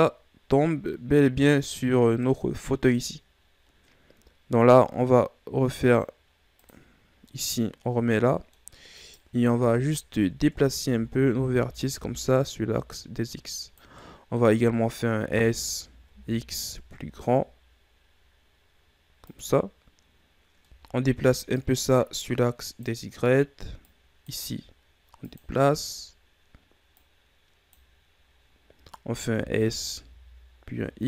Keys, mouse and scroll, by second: 0.4-6.0 middle drag, 7.2 click, 8.8-9.6 middle drag, 9.6 right click, 10.2 Tab, 11.2 Tab, 11.9 a, 12.5 a, 13.0 click, 14.6-15.9 middle drag, 15.9 s, 21.1 a, 22.1 click, 27.6 click, 29.9 s.